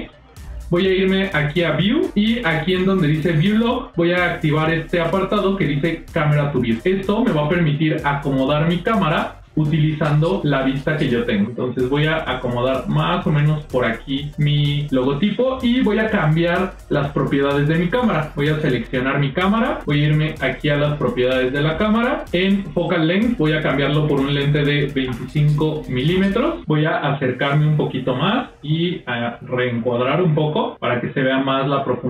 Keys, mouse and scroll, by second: 1.6 click, 6.1 click, 6.8 click, 7.7-9.2 shift+middle drag, 9.3 ctrl+middle click, 11.3 shift+middle click, 12.4-13.9 middle drag, 14.2 shift+middle click, 16.9 click, 20.2 click, 23.0-26.5 drag, 26.5 KP_Decimal, 26.7-28.1 shift+middle drag, 28.4 ctrl+middle click, 29.3 middle click, 30.3 shift+middle click, 30.8 middle click, 31.8 shift+middle click.